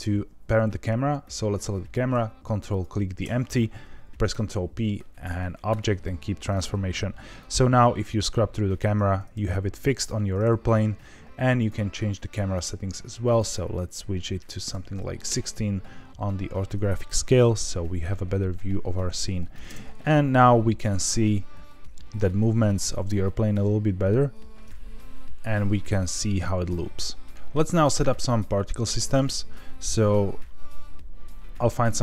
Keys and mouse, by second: 1.3 click, 2.7 ctrl+click, 4.3 ctrl+p, 7.4-10.0 drag, 11.5 click, 12.5 click, 13.3-15.7 drag, 17.5-19.5 drag, 19.6 space, 29.8-31.6 drag.